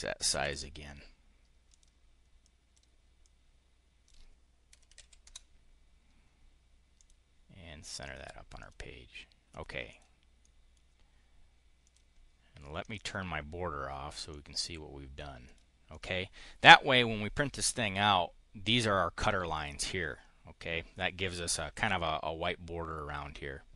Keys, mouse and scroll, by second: 0.0-0.8 typing, 1.5 click, 2.3 click, 3.1-4.1 drag, 4.3-5.4 typing, 6.8 click, 7.9 click, 8.4 click, 9.3 click, 9.6 click, 10.3 click, 11.7 click, 12.7 click, 14.1 click, 15.3 click, 15.6 click.